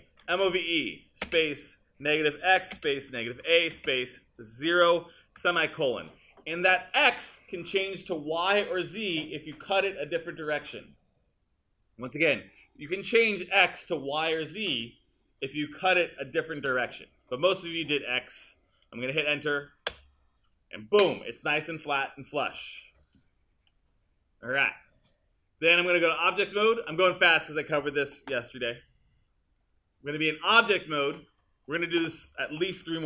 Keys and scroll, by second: 0.0-1.3 typing, 2.8-5.4 typing, 19.9 Return.